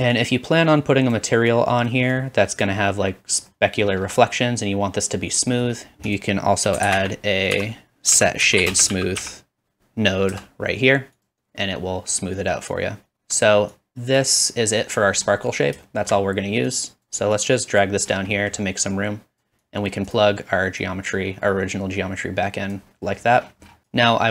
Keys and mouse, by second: 2.7-6.2 middle drag, 4.4-7.3 drag, 4.4-6.2 right drag, 6.8 shift+a, 10.9-14.2 drag, 11.5 typing, 12.7-14.2 middle drag, 12.7-14.2 right drag, 20.2 click, 21.0-23.9 middle drag.